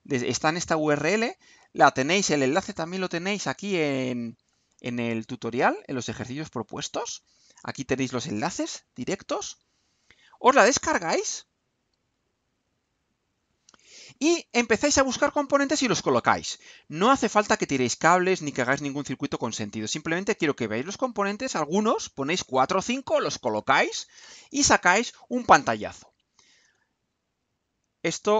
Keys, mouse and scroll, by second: 1.7 click, 2.7-3.7 scroll down 4, 5.9 click, 10.9 click, 12.1 click.